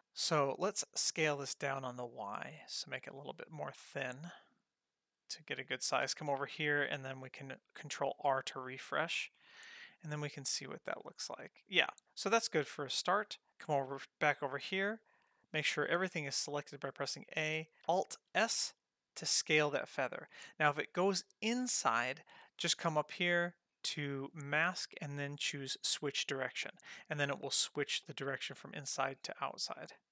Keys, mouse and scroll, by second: 1.1 s, 6.0 drag, 8.0 ctrl+r, 9.5 click, 9.8 Tab, 10.5-11.0 scroll up 3, 11.3-11.7 scroll down 1, 11.7-12.0 scroll up 1, 12.0 scroll down 3, 12.5-12.9 scroll up 2, 13.5 middle click, 16.7 a, 18.3 alt+s, 23.3-24.5 scroll up 5, 24.5-26.8 drag, 28.6-30.1 drag.